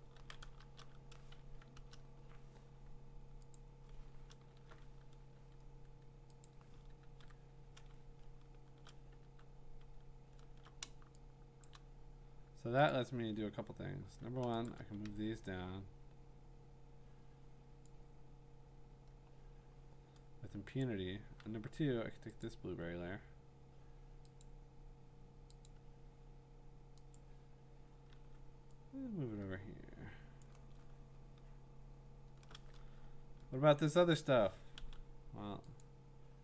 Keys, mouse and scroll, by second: 0.2 ctrl+z, 0.6 BackSpace, 1.3 Escape, 1.7 alt+BackSpace, 2.3 BackSpace, 3.6 click, 4.4 alt+BackSpace, 6.4 click, 7.1 ctrl+d, 8.0-8.7 ctrl+scroll, 9.2 v, 10.1-10.8 scroll, 11.6 click, 12.9 click, 14.7 shift+click, 15.1 v, 17.8 click, 18.6 click, 20.8 click, 22.4 click, 24.4 click, 25.7 click, 27.2 click, 28.1 v, 30.4 click, 30.8-32.1 scroll, 34.1 click, 35.8 click.